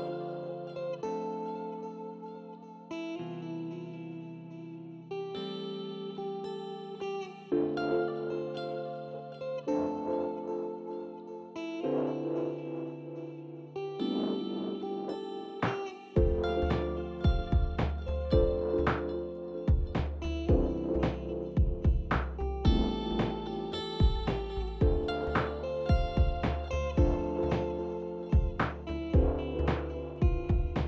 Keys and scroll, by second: 6.1 ctrl+r.